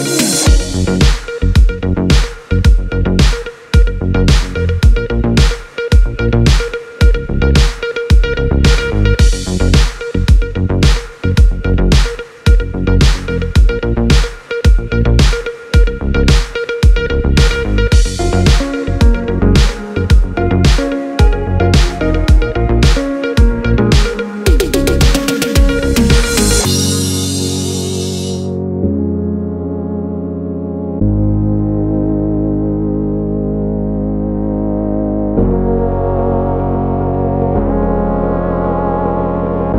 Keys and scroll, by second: 10.5 u.